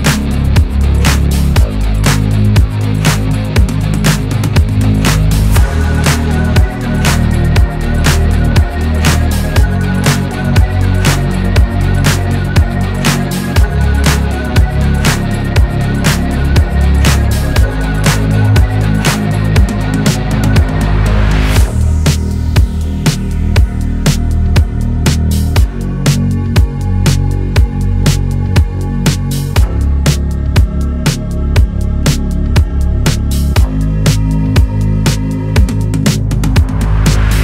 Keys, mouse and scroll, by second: 0.0 3, 0.5 alt+click, 1.7 shift+middle click, 2.6 scroll up 2, 4.2 scroll up 1, 5.8 click, 6.1 scroll down 2, 6.2 middle click, 7.1 scroll up 2, 7.5 shift+middle click, 8.4 click, 9.2 scroll up 2, 9.4-10.6 middle drag, 10.6 ctrl+KP_Add, 10.8 ctrl+KP_Add, 11.0 ctrl+KP_Add, 12.0 click, 12.4 Tab, 12.5 scroll down 7, 12.8-15.4 middle drag, 15.4 click, 15.8 scroll down 3, 16.0 shift+middle click, 16.5 scroll up 4, 16.9 middle click, 17.9 click, 18.8 click, 19.3-19.8 scroll up 3, 19.8-20.3 scroll down 2, 20.3 click, 20.8 shift+middle click, 21.2-21.6 scroll up 2, 21.6 click, 21.9 Tab, 22.3 shift+middle click, 22.5 scroll up 4, 22.8 shift+middle click, 23.8 ctrl+r, 25.8 ctrl+z, 26.2 scroll down 1, 26.3 shift+middle click, 26.8 ctrl+r, 31.2 ctrl+r, 32.0-32.8 scroll up 1, 32.8 ctrl+r, 33.9 ctrl+r, 35.1 shift+middle click, 35.7 Tab, 36.0 scroll down 1, 36.2 click, 36.3-37.4 middle drag.